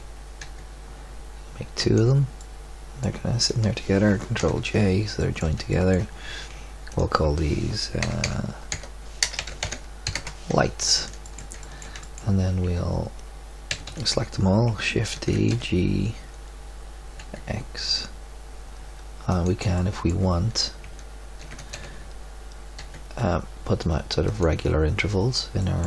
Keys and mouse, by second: 2.6 middle click, 4.4 ctrl+j, 6.8 click, 11.2-12.0 middle drag, 12.6 Tab, 13.6 a, 13.8 a, 15.1 shift+d, 15.4 g, 21.4 shift+d, 21.8 g, 25.7-25.8 middle drag.